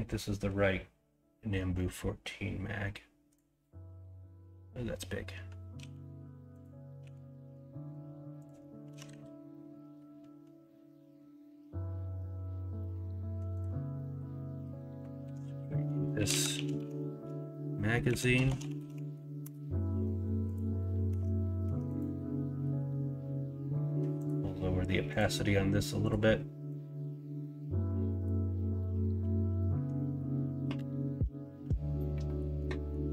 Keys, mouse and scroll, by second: 7.0 s, 8.8 KP_1, 9.0 KP_3, 15.2 F2, 21.0 Tab, 21.6 Tab.